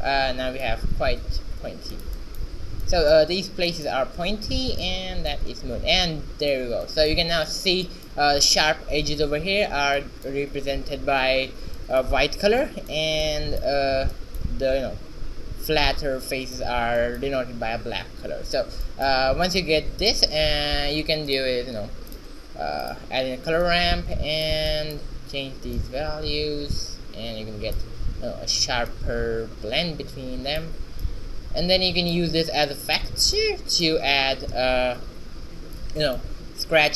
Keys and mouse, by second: 0.9 Tab, 1.3 z, 4.7 shift+z, 18.9-21.3 drag, 20.4 shift+a, 23.0-27.7 drag, 29.0-30.9 drag, 31.1-33.4 drag, 33.4-36.9 middle drag.